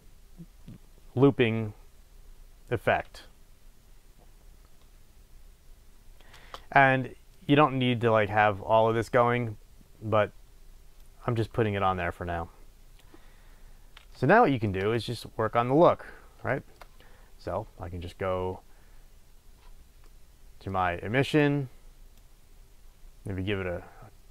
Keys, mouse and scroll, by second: 6.4 space, 11.0-14.3 drag, 14.3-21.3 shift+middle drag, 15.8-16.6 scroll up 2, 21.3 drag.